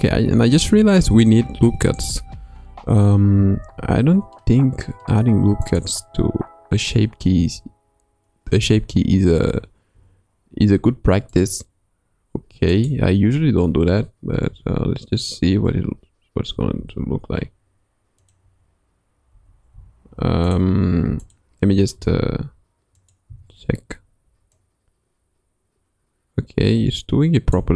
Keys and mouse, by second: 1.1 Tab, 2.8 Tab, 3.5 ctrl+r, 7.4 Tab, 8.6 Tab, 9.3 Tab, 9.9 Tab, 11.4-12.5 drag, 12.7 click, 14.5 o, 15.5 Escape, 16.8 ctrl+r, 19.3 Tab, 19.7 Tab, 21.3 click, 21.9 g, 23.3 Tab, 24.6-27.6 drag.